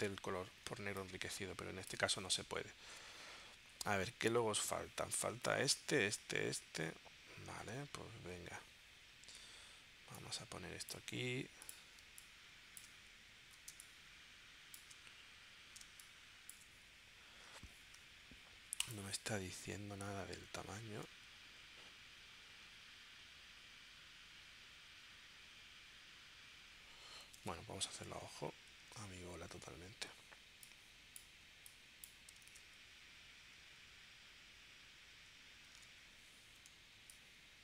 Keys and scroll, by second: 0.9 space, 7.5 super+Tab, 12.0 space, 13.8 space, 15.8 space, 27.4 super+Tab, 28.8 super+Tab, 32.5 super+Tab, 35.7 super+Tab.